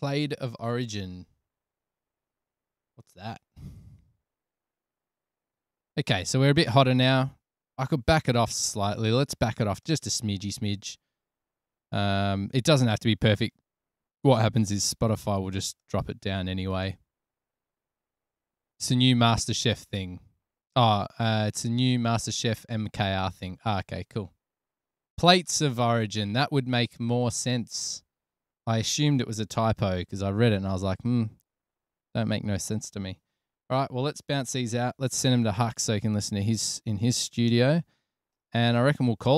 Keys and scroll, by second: 8.1 super+-, 30.2 super+s, 33.6 super+-, 34.7 super+s, 35.3 alt+super+b, 35.9 Tab, 37.8 Return.